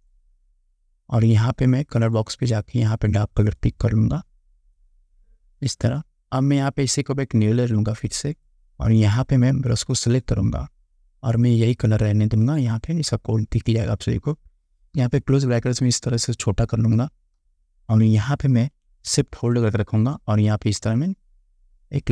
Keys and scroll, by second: 15.1 [.